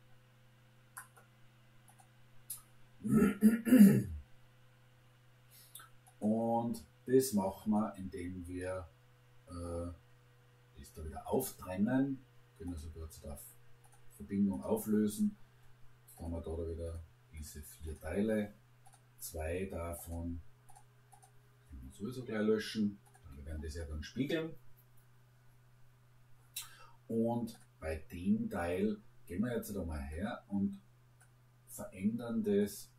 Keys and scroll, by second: 21.9 Delete, 23.2 Delete.